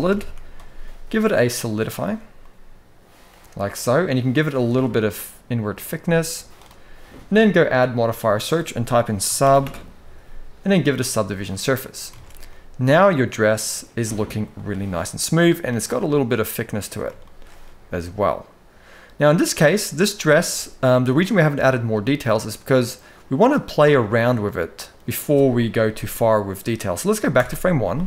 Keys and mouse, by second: 1.7 shift+middle drag, 2.1-3.0 middle drag, 3.9-6.3 drag, 7.4-11.0 drag, 11.6 middle drag, 11.8 alt+a, 12.2-13.8 middle drag, 14.3-15.1 middle drag, 15.8-16.8 middle drag, 17.0 shift+middle drag, 17.6-19.2 middle drag, 20.3-21.0 middle drag, 21.6-23.2 middle drag, 23.9-24.6 middle drag, 27.2 shift+Left.